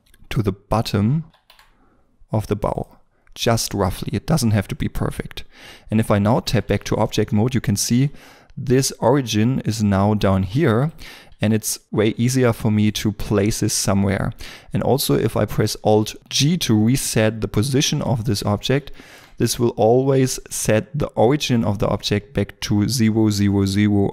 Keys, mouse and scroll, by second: 0.0 scroll up 1, 1.2 g, 1.4 z, 3.7 scroll down 1, 6.8 Tab, 10.4 g, 10.8 right click, 12.7 right click, 14.8 right click, 16.2 alt+g, 18.2 scroll up 1, 18.8 shift+middle click.